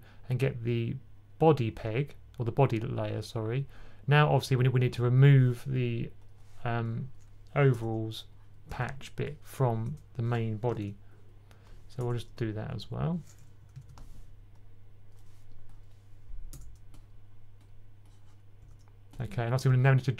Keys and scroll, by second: 10.6 super+z, 13.6 super+z.